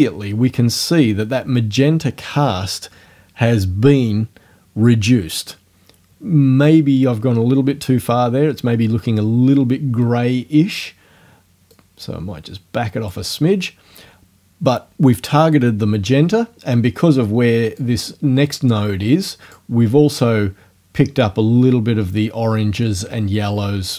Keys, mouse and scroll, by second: 11.8 click, 17.8 click.